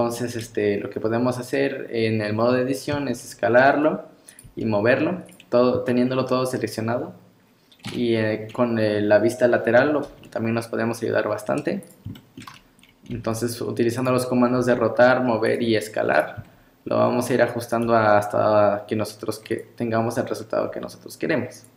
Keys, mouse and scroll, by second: 0.9 scroll up 2, 2.9 s, 4.5 g, 5.5 scroll up 3, 5.9 shift+middle click, 7.0 scroll up 2, 7.9 KP_3, 10.1 r, 12.2 shift+middle click, 13.1 g, 14.3 scroll up 2, 14.6 r, 15.7 g, 16.4 s, 17.9 g, 20.7 s.